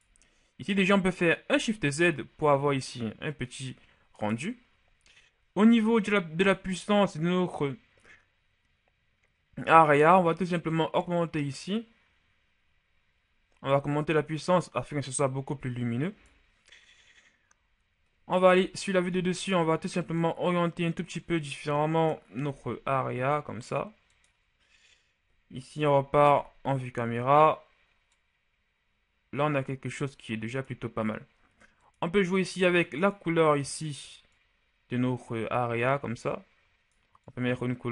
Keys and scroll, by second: 1.4 shift+z, 18.3 KP_7, 22.3 r, 25.7 KP_0, 26.3 shift+KP_0.